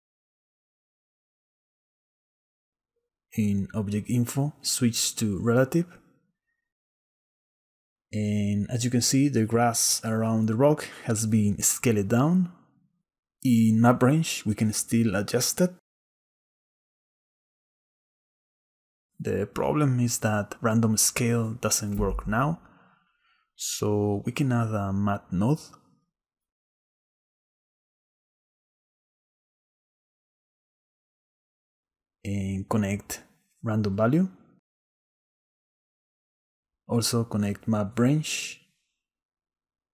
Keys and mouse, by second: 1.8 middle click, 2.6 click, 3.7 click, 5.6 click, 8.3-9.3 drag, 12.1-14.0 drag, 15.1-16.6 shift+drag, 16.8 shift+middle click, 17.3 shift+middle click, 18.0 shift+middle click, 19.1-21.8 drag, 22.9 click, 24.2 click, 25.6 shift+a, 32.2 click, 33.7-34.8 drag, 35.9-37.2 drag, 37.9 click, 39.2 click.